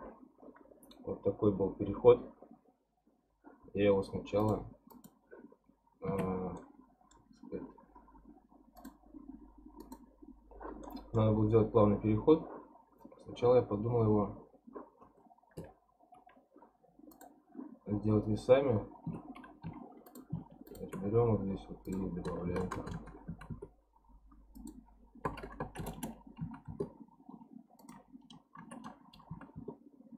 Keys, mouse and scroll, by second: 0.4-1.1 scroll down 8, 1.1-2.2 scroll up 11, 2.2-3.4 scroll down 1, 4.4 click, 4.9 click, 5.5 scroll down 2, 6.1 Tab, 6.6-8.9 middle drag, 8.9 click, 10.0 click, 10.8-14.0 middle drag, 15.6 n, 17.1 click, 19.1 Tab, 19.6 2, 20.1 click, 20.7 shift+click, 21.9-22.9 drag, 22.9 KP_0, 24.5-25.9 drag, 25.9 BackSpace, 27.8-29.1 drag, 29.1 BackSpace.